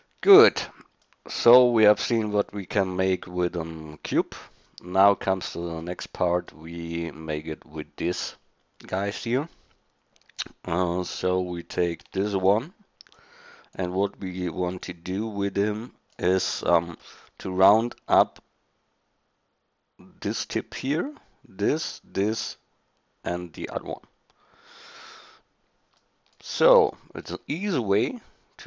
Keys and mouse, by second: 5.0 middle click, 11.1 click, 12.2 shift+d, 16.5-17.2 middle drag, 26.1 middle click.